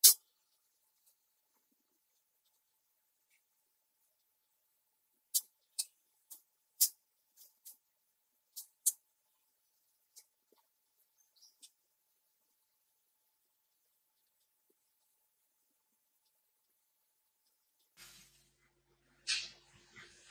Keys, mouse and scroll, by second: 0.0 click, 0.2 ctrl+click, 1.1 click, 2.0 space, 2.1 click, 2.1 click, 2.5 space, 2.9 click, 2.9 space, 3.4-6.0 ctrl+drag, 6.0-7.1 drag, 7.1 space, 7.2 ctrl+click, 8.0 click, 9.0 click, 9.3 space, 9.6 ctrl+click, 9.9 ctrl+click, 11.1 click, 11.6 ctrl+z, 12.0-14.0 drag, 14.0 space, 14.1 click, 14.3 ctrl+click, 14.6 click, 14.8 ctrl+click, 15.1 click, 16.2 space, 16.3 click, 16.8 click, 17.4 space, 17.5 ctrl+click.